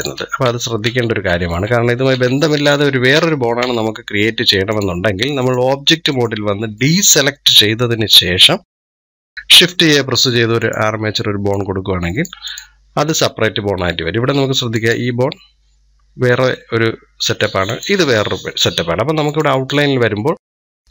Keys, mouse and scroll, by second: 0.3 ctrl+z, 0.6 ctrl+z, 1.5 ctrl+z, 1.9 ctrl+z, 3.4 ctrl+z, 4.5-7.2 drag, 7.2-8.1 middle drag, 8.1-9.0 scroll down 1, 9.0-9.5 scroll down 1, 9.5 shift+a, 11.3 click, 12.3 click, 17.5 click, 19.1 click.